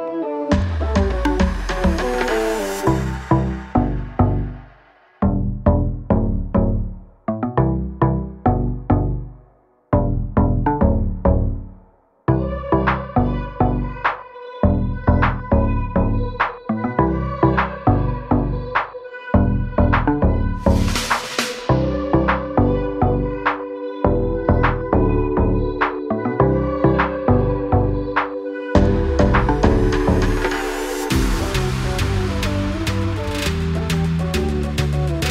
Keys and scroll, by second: 0.7 Up, 1.6-4.3 typing, 1.8 Return, 5.7 m, 6.3 Up, 6.9 2, 7.1 Return, 7.5 space, 9.4 f, 10.3 2, 10.5 Return, 11.5 space, 11.8 p, 12.7 2, 12.9 Return, 13.3 space, 17.6 e, 20.3 space, 20.5 Escape, 21.4 m, 28.0 Right, 28.5 Left, 29.8 Right, 30.1 Left, 31.2 Left, 31.5 Right, 33.6 space.